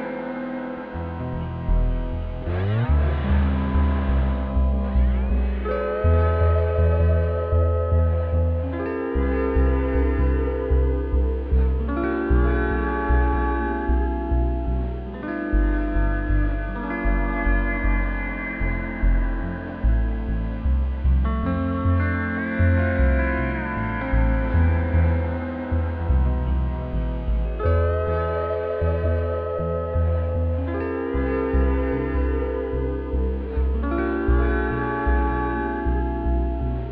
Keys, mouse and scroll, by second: 0.0-0.7 typing, 0.0 right click, 0.4-0.7 scroll down 2, 0.4 Tab, 1.6 scroll up 1, 1.8 `, 2.2-2.6 scroll up 1, 2.6 click, 3.2 e, 4.2 `, 4.6 alt+click, 4.8 f, 5.0 `, 5.9 click, 7.9 `, 8.6 scroll down 2, 8.7 `, 9.6 scroll up 2, 10.0 `, 10.9 scroll down 2, 11.1 `, 12.0 `, 12.5 scroll up 2, 15.0 KP_1, 15.4-15.8 scroll up 1, 15.8 1, 16.3 click, 16.9 e, 18.4 click, 18.9 2, 19.2 click, 19.4 1, 19.5 click, 20.2 f, 21.1 `, 21.8 click, 22.0 shift+click, 22.4-28.3 typing, 24.5 click, 26.0 click, 26.6 click, 26.8 shift+click, 27.4 click, 27.8 shift+click, 29.5 click, 29.9 right click, 30.4 click, 30.6 KP_1, 31.0 scroll up 1, 31.6 1, 31.7 click, 32.2 g, 33.6 g, 33.8 click, 34.0 2, 34.2 click, 34.5 f, 35.3 click, 35.5 shift+click, 35.7 f, 35.8 scroll down 2, 36.4 Tab.